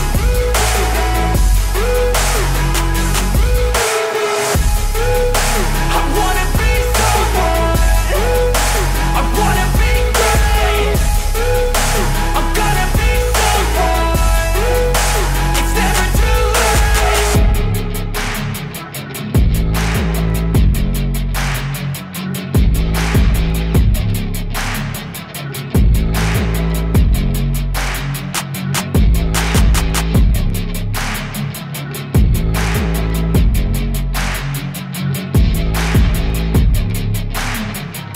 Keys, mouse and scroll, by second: 0.5-1.4 drag, 1.9 click, 3.0 click, 4.1 space, 7.0 space, 7.2 middle click, 8.9-10.2 drag, 9.8 KP_0, 11.0 click, 11.4 space, 16.4 space, 16.7-18.2 middle drag, 18.5 click, 20.2-21.8 drag, 22.3 shift+click, 22.4 shift+a, 26.5 drag, 26.8 r, 27.8 click, 28.2-29.5 drag, 28.8 KP_0, 30.1 click, 30.5 space, 32.9 shift+middle click, 34.2 click, 34.7 KP_0, 35.9 space, 37.1 space, 37.8 click, 37.8 space.